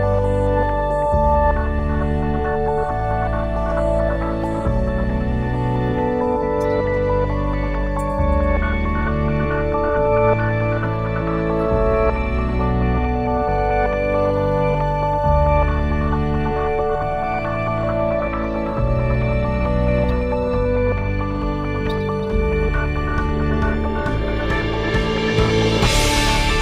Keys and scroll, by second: 16.2 ctrl+s.